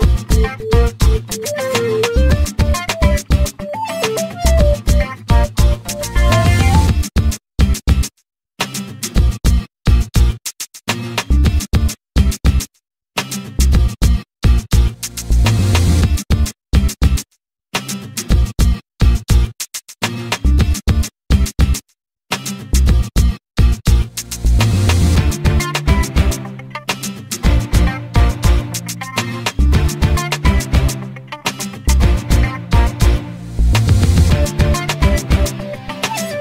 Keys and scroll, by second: 2.8 space, 4.9 m, 8.3 e, 9.7 space, 12.4 m, 25.8 l, 30.3 r, 34.4 space, 35.7 m.